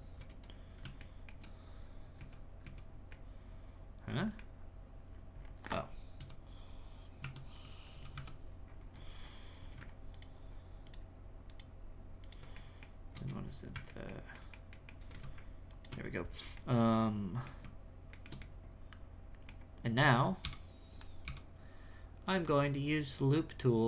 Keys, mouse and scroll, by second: 1.0 shift+middle click, 1.5-2.2 scroll down 6, 2.3 z, 3.1-4.7 middle drag, 4.7-5.1 scroll up 1, 5.1-5.7 scroll down 9, 5.7-6.2 scroll up 3, 6.2 KP_Divide, 7.2 KP_Divide, 8.1 KP_3, 8.6-10.1 scroll up 13, 10.1 alt+shift+right click, 10.8 alt+shift+right click, 11.5 alt+shift+right click, 12.2 alt+shift+right click, 12.5-13.9 shift+middle drag, 14.8 alt+middle click, 15.7 alt+shift+right click, 16.0-16.5 scroll down 10, 16.5-17.5 middle drag, 17.5-18.1 scroll down 2, 18.1-19.8 shift+middle drag, 19.8-20.4 scroll down 2, 20.4 n, 21.2 n, 23.0 click.